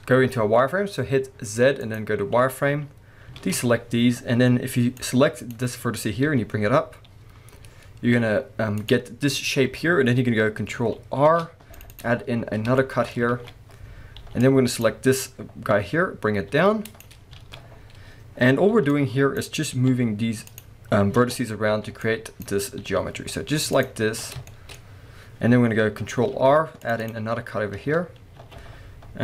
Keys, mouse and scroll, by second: 3.4 alt+a, 5.0 click, 6.3 g, 8.9 click, 11.2 ctrl+r, 12.0 click, 12.8-15.1 shift+middle drag, 13.3 alt+a, 14.2 b, 15.1-15.7 scroll up 2, 15.7-17.0 middle drag, 15.7 g, 17.0 click, 17.2 scroll down 1, 17.4 alt+a, 17.7-18.7 scroll up 1, 18.7 b, 20.6 click, 21.2 alt+a, 23.8 click, 24.0 alt+a, 24.2 scroll down 1, 24.5 shift+middle click, 24.8-26.3 scroll up 1, 26.3 ctrl+r, 26.3 middle click, 27.1 click, 27.5-28.4 scroll up 1, 28.4 alt+a.